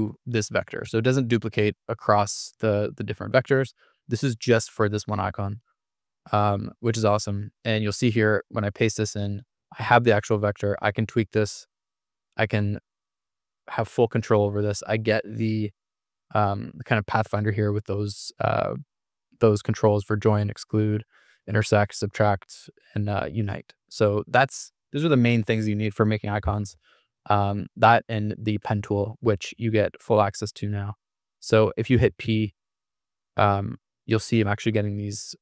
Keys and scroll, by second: 13.1 super+z, 14.0 super+=, 31.9 p.